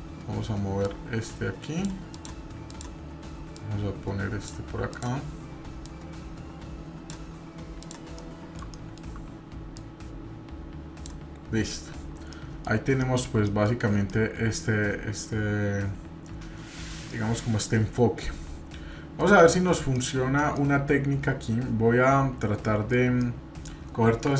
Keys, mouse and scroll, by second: 0.8-1.9 drag, 2.1 click, 2.7 click, 3.5-4.5 drag, 4.9 click, 5.8-7.1 drag, 7.8 click, 8.2 middle click, 9.7-11.1 drag, 12.0 scroll down 3, 12.3-12.7 middle drag, 12.7-13.0 scroll down 1, 13.0-13.7 shift+middle drag, 14.1-19.2 middle drag, 19.5 middle click, 19.9 middle click, 20.5-23.0 middle drag, 23.2-23.8 middle drag, 23.8-24.2 scroll up 2.